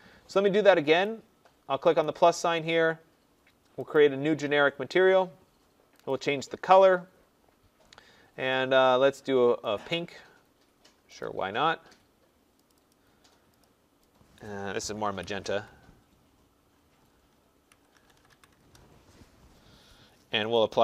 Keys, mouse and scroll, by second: 1.0 click, 2.0 click, 3.9 click, 6.0 click, 9.1 click, 9.7 click, 11.2 click, 12.6 click, 12.8 click, 13.6 click, 14.3 click, 14.9-15.9 typing, 17.4-18.7 typing, 20.7 click, 20.7 typing.